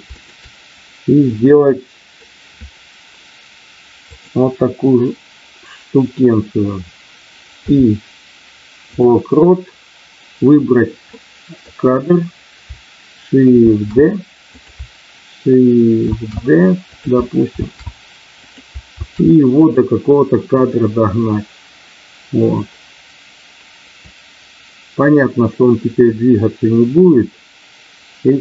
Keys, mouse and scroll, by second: 0.2 shift+click, 1.2 middle click, 3.9 click, 11.3 middle click, 13.6 shift+d, 14.4 click, 16.9 click, 18.5 click, 19.1 shift+d, 24.0-28.4 drag.